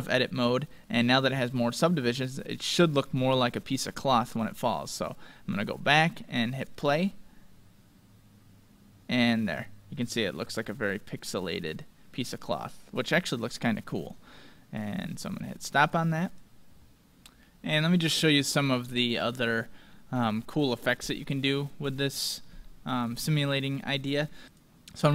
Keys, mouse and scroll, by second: 1.5-2.1 scroll down 1, 2.1-5.2 middle drag, 5.5-8.4 drag, 7.7-9.8 middle drag, 10.3-12.1 middle drag, 16.3 click, 17.5-18.1 scroll down 1, 18.1-19.8 middle drag, 19.8 scroll down 1, 20.0-24.4 middle drag, 24.4 click.